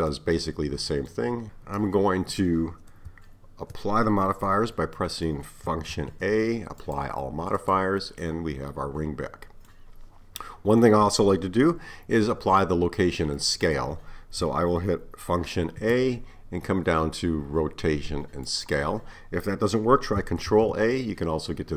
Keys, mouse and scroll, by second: 5.0 middle click, 6.0 a, 7.6 click, 8.2-14.4 middle drag, 15.7 a, 20.5 ctrl+a.